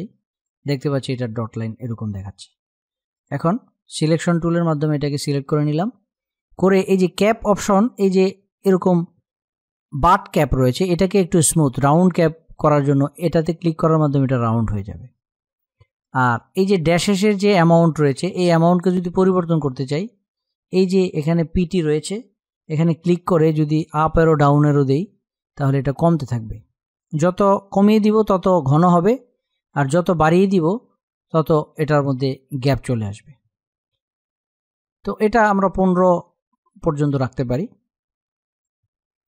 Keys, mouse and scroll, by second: 0.0 space, 0.5 click, 0.6 space, 2.9 click, 12.7 click, 18.9 click, 23.1 Down, 24.7 Up, 25.1 Down, 25.9 Down, 27.3 Down, 28.4 Up, 32.9 Down, 33.9 Up, 35.3 Down, 38.3 click.